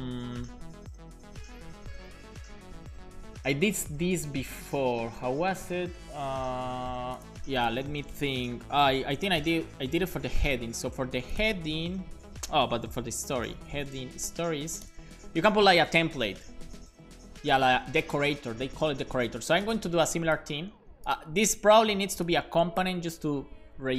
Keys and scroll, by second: 8.9 super+p, 9.5-10.4 typing, 10.5 Return, 12.9 super+p, 13.1-14.4 typing, 14.5 Down, 14.8 Down, 20.8 super+c.